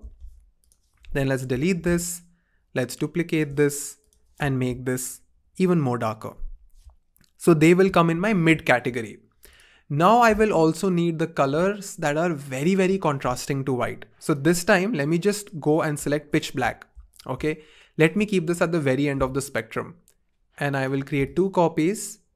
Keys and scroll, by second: 1.0 BackSpace, 5.2 shift+Down, 5.3 shift+Down, 5.5 shift+Down.